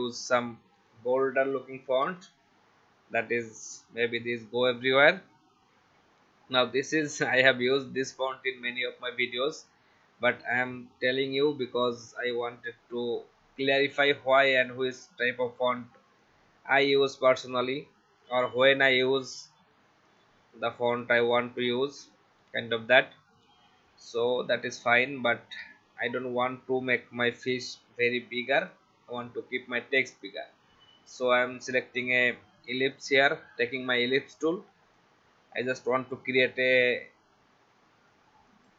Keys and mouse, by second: 0.8 click, 1.7-2.5 typing, 3.6 click, 7.6 right click, 9.2 click, 10.6 shift+click, 14.5 shift+click, 16.2 shift+click, 18.6 click, 20.1 click, 22.4 Right, 24.3 alt+shift+click, 25.6 shift+Up, 26.9 click, 28.6 click, 30.2 click, 32.9 alt+shift+click, 35.8 shift+x, 36.2 v, 38.5 click.